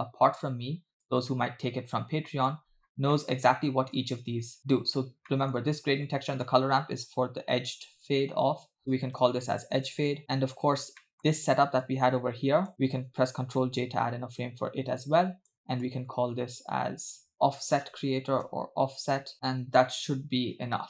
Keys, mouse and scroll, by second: 1.1 click, 1.2-2.5 drag, 2.8 scroll down 2, 3.1 middle click, 4.0-4.8 drag, 4.9-5.3 scroll up 2, 5.4 middle click, 5.7-6.3 scroll up 2, 7.8 ctrl+j, 8.8-10.2 drag, 10.2 middle click, 11.0 middle click, 11.9-12.7 drag, 13.6 ctrl+j, 15.0 click, 15.2 click, 15.8 click, 16.6 click, 17.3 middle click, 17.7-19.3 drag, 19.0 f, 19.3 middle click, 19.3 scroll down 2, 19.8-20.2 scroll down 1.